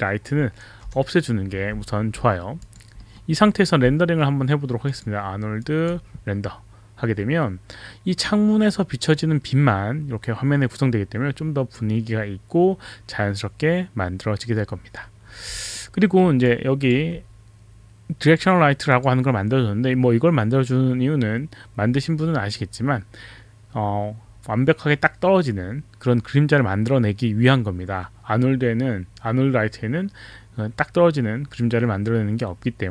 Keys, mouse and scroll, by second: 0.9 Delete, 2.2 alt+middle click, 2.6 alt+click, 3.0 alt+middle click, 4.8 click, 5.6 click, 5.7 click, 15.8 alt+middle click, 16.4 alt+click, 16.5 alt+click, 16.5 alt+middle click, 18.3 click, 18.9 click.